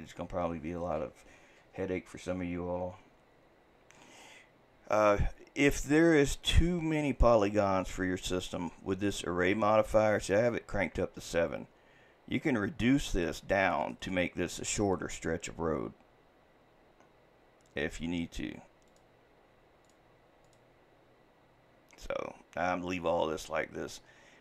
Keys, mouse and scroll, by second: 13.2-24.4 drag.